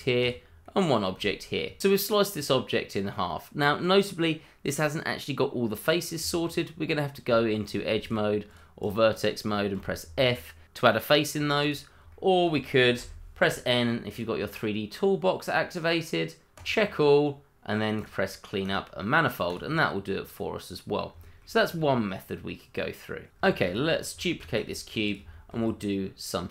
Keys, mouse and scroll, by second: 0.3 double click, 0.6 middle click, 1.1 g, 1.8 middle click, 5.6 scroll up 1, 5.8 middle click, 6.2 click, 7.3 Tab, 7.6 click, 8.0 shift+click, 8.1 click, 9.7 f, 10.3 middle click, 11.1 middle click, 11.2 shift+middle click, 11.4 Tab, 12.0 click, 12.1 shift+middle click, 12.1 middle click, 14.1 click, 16.5 click, 18.0 click, 19.8 middle click, 21.6-22.5 scroll up 1, 22.5-23.1 scroll down 1, 23.1 click, 23.4 shift+middle click, 23.5 middle click, 23.6 shift+middle click, 24.0 middle click, 24.4 shift+d, 25.1 click, 25.4 middle click, 25.6-26.2 scroll up 1, 26.2 middle click.